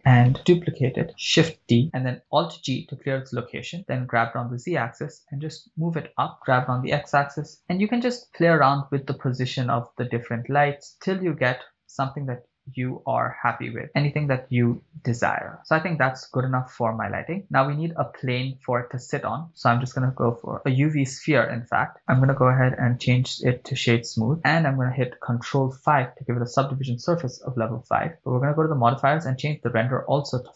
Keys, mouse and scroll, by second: 1.6 shift+d, 1.8 click, 2.7 alt+g, 3.8 g, 4.1 z, 6.3 click, 6.4 g, 7.0 x, 10.9 click, 12.1 shift+d, 12.2 x, 15.1 click, 16.3 scroll up 2, 17.3 scroll down 3, 18.6 scroll down 1, 20.1 shift+a, 22.2-24.0 drag, 26.5 ctrl+5, 28.1 click, 29.6-30.5 drag.